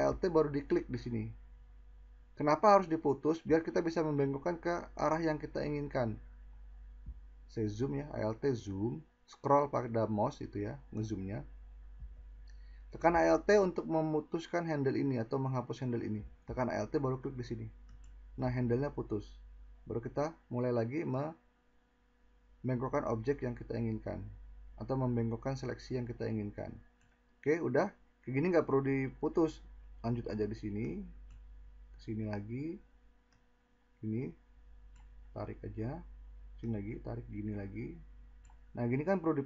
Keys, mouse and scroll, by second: 33.3-33.7 drag, 38.9 click, 39.0 click.